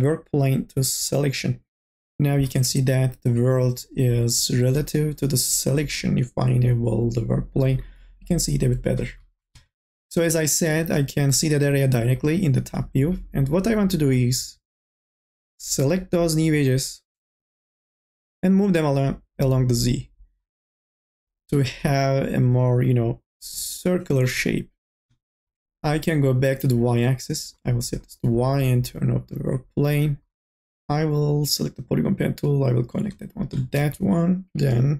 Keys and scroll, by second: 33.8 e, 34.6 m.